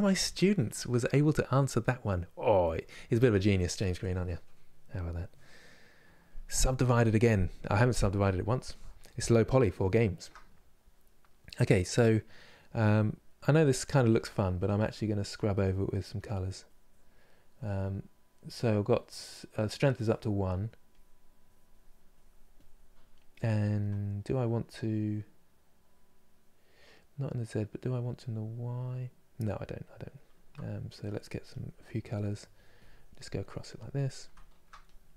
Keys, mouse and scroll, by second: 8.8-13.2 middle drag, 13.2 f, 15.5-17.8 drag, 17.8-19.7 middle drag, 19.7-34.0 drag, 34.0 shift+middle click, 34.5-35.1 drag.